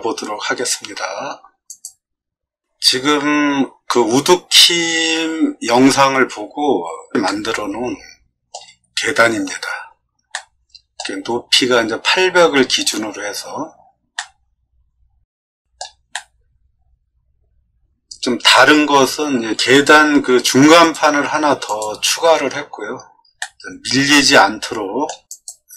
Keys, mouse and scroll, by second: 1.6 click, 7.2-8.4 middle drag, 10.2 shift+middle click, 14.1-15.7 middle drag, 16.0-18.5 middle drag, 19.6 click, 20.7 click, 21.6 click, 23.3-25.0 middle drag, 25.2 click.